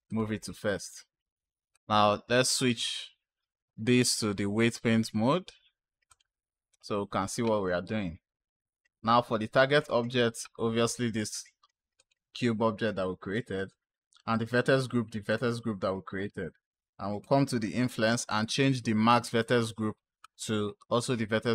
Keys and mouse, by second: 1.6 click, 4.0-6.0 drag, 9.6 click, 11.8 click, 14.6 click, 17.1 click, 19.2 click.